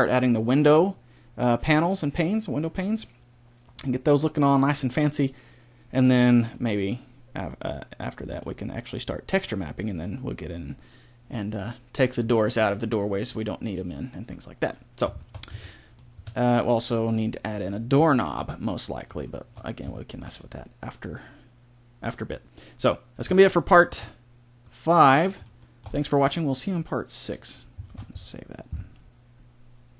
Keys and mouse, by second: 6.4-10.0 middle drag, 14.4 middle click, 15.4 a, 15.8 middle click, 16.1 a, 24.8 middle click, 27.8 ctrl+s.